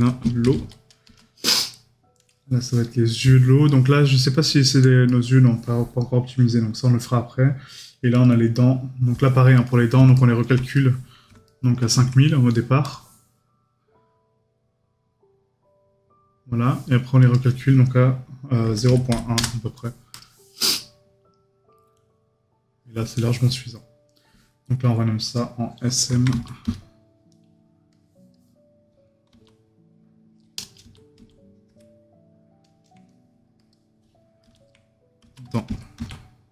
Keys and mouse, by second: 3.7 right click, 5.1 right click, 9.6 right click.